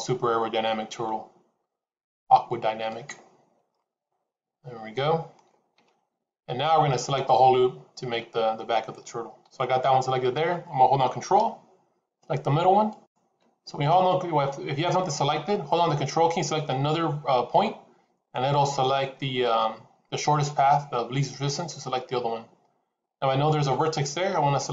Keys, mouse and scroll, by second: 3.6 middle click, 9.3 KP_7, 12.8 ctrl+click.